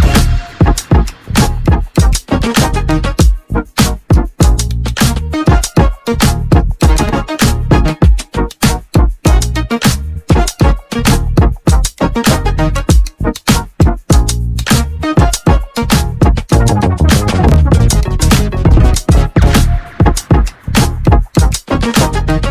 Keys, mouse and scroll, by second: 0.6-1.5 scroll down 1, 1.5 click, 2.3 shift+middle click, 2.9-3.5 scroll up 1, 3.5 shift+middle click, 4.2-5.4 scroll up 2, 5.4-6.6 scroll down 1, 6.6 1, 8.0 click, 8.8 click, 10.9 y, 12.4-13.6 right drag, 13.6 g, 15.2 ctrl+z, 15.6 ctrl+z, 16.9 click, 17.6 click, 18.7 g.